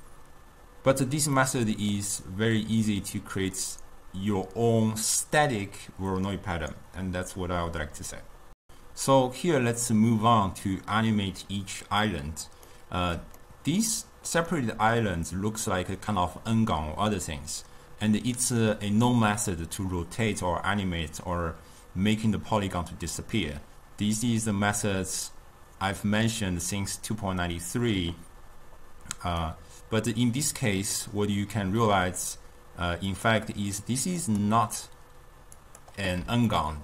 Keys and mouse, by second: 1.5-4.6 middle drag, 12.6-17.7 middle drag, 29.6-32.6 middle drag, 33.3 click, 34.2 click, 35.6 click, 36.5-36.8 ctrl+middle drag.